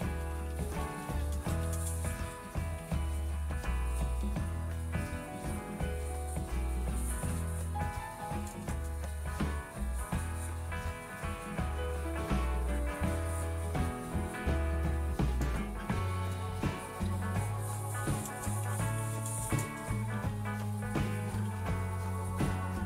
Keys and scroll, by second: 0.0-0.8 typing, 5.7-6.2 typing, 8.2 Up, 9.0 Left, 9.5 Left, 9.5-9.9 Left, 10.7 Home, 12.4 #, 12.9 space, 13.8 Return, 15.5-19.8 typing, 21.3-22.8 typing.